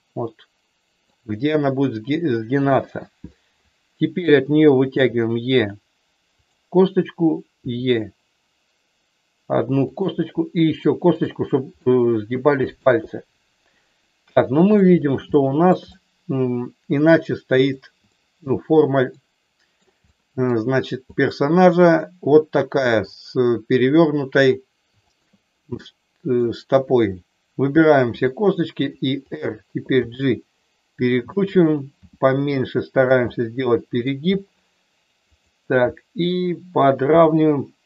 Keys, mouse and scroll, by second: 2.6 KP_3, 4.9 e, 7.6 e, 10.4 e, 11.0 click, 11.9 middle click, 13.1-14.8 middle drag, 15.4 shift+middle click, 15.9-17.8 middle drag, 18.1 shift+middle click, 19.1 middle click, 20.1 middle click, 21.1 click, 25.0 shift+click, 25.9 middle click, 28.1 r, 29.3 click, 29.9 g, 31.0 click, 32.0 r, 32.9 click, 33.1 middle click, 35.3 click, 37.2 g.